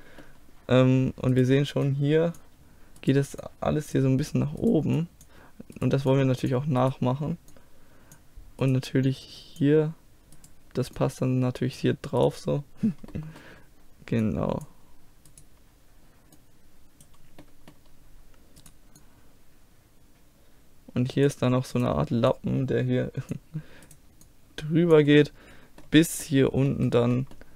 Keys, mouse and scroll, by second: 0.0-1.4 middle drag, 10.4 click, 11.1-13.2 drag, 11.1-13.2 right drag, 13.2-15.3 middle drag, 14.3-15.3 scroll up 1, 15.3-17.3 drag, 15.3-17.2 right drag, 17.3-18.7 middle drag, 19.0-20.4 middle drag, 20.4 click, 20.4 right click, 21.8-25.6 drag, 22.3-23.6 right drag, 23.9-25.6 right drag, 25.3-27.5 middle drag, 25.7 click, 25.7 right click, 25.8 click, 25.8 right click.